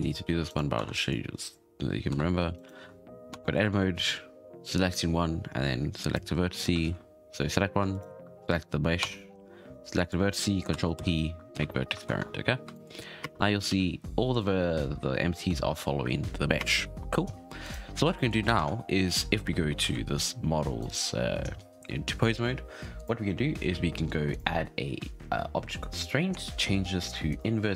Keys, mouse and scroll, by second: 0.0 Tab, 0.4 right click, 0.7 Tab, 0.9 click, 2.1 Tab, 2.5 shift+right click, 3.3 Tab, 6.1 right click, 6.8 ctrl+z, 7.9 shift+right click, 9.0 Tab, 9.9 click, 10.9 ctrl+p, 12.0 ctrl+Tab, 12.3-12.7 scroll down 6, 12.7-13.2 shift+middle drag, 13.2 space, 13.4-13.7 scroll down 2, 13.7 alt+a, 14.1-15.3 scroll up 3, 15.3-16.6 shift+middle drag, 16.6 space, 17.6 right click, 18.1-18.5 shift+middle drag, 18.5 ctrl+Tab, 19.0 a, 19.3-19.8 scroll up 5, 19.8 alt+a, 20.3 scroll down 2, 20.8 right click, 22.9 click, 23.7-24.3 scroll up 3, 24.3-27.4 drag.